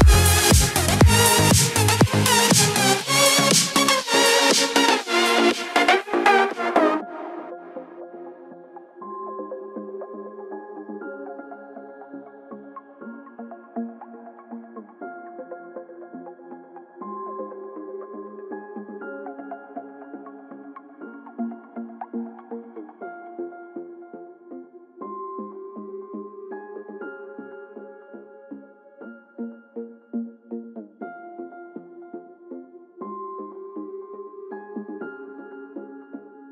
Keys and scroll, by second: 8.7 ctrl+0, 14.7 shift+F5, 21.7 ctrl+d, 29.3 ctrl+j.